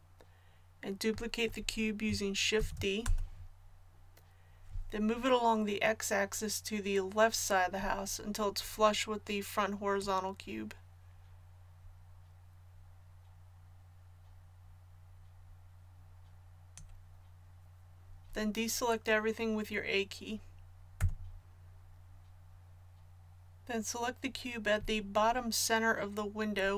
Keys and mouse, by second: 2.6 shift+d, 9.9-11.8 drag, 20.9 a.